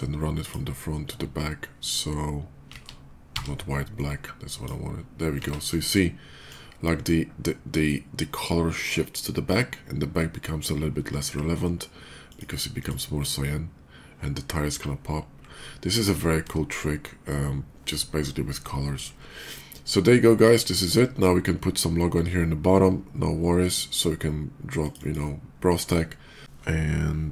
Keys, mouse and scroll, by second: 2.5 ctrl+z, 3.0 x, 3.3 ctrl+z, 3.7 click, 5.4 ctrl+z, 5.4 click, 12.1 click, 12.4 click, 20.1 click, 24.5 click, 24.8 click, 26.4 Return.